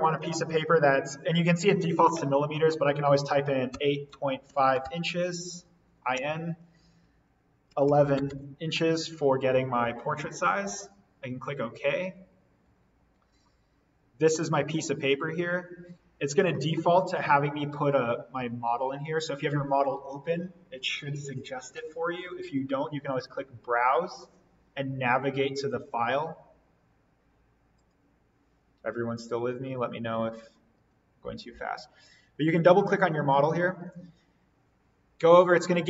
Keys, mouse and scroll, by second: 3.7-5.3 typing, 6.1 Tab, 7.4-8.6 typing, 10.3 typing, 10.7 click, 11.8-12.2 scroll up 1, 12.9-14.8 scroll down 1, 23.0 click, 27.7 click, 32.4 click.